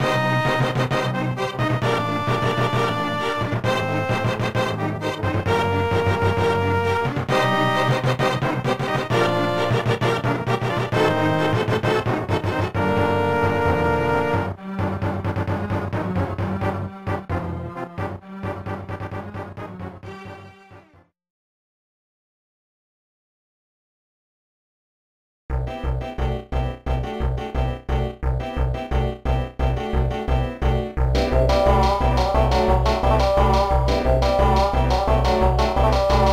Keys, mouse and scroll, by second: 0.9 click, 1.0 click, 1.2 ctrl+s, 1.3 click, 2.0-3.6 typing, 7.2 click, 7.5 ctrl+s, 7.7 click, 8.3 0, 9.6 ctrl+s, 10.8 click, 11.2 click, 19.5 ctrl+s, 19.8 click, 34.5 click, 36.1 click.